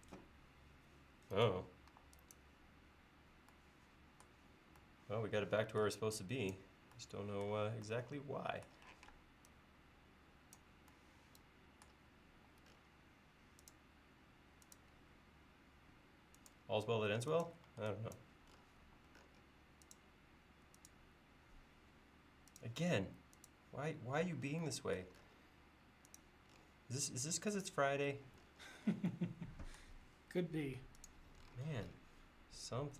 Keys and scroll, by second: 1.9 e, 9.0 p, 12.4 l, 17.7 e, 18.9 l.